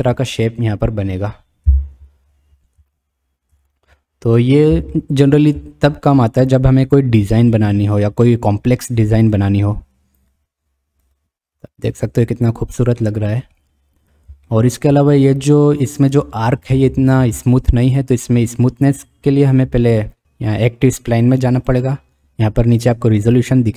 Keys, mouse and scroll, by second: 1.8 KP_Decimal, 3.0-3.5 shift+middle drag, 4.0-4.6 middle drag, 4.9-5.4 shift+middle drag, 9.4 click, 11.2 click, 13.0-13.6 middle drag, 14.5-14.9 shift+middle drag, 21.6 click.